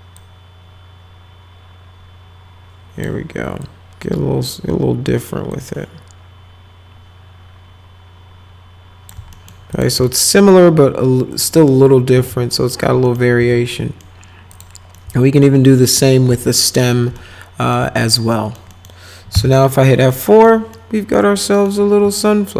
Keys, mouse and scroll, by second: 0.2-3.0 drag, 3.6 click, 5.5-9.1 drag, 9.3 alt+middle click, 9.7 middle click, 10.1 alt+middle click, 11.3 click, 12.2 z, 12.5 middle click, 13.1 middle click, 13.4 z, 13.7 middle click, 14.5 click, 14.9-16.0 alt+middle drag, 16.3 alt+middle click, 17.2 alt+middle click, 18.0 click, 18.3 right click, 18.7 right click, 19.3 F4, 20.1 right click, 20.7 right click, 21.4 right click, 22.2-22.5 ctrl+alt+right drag.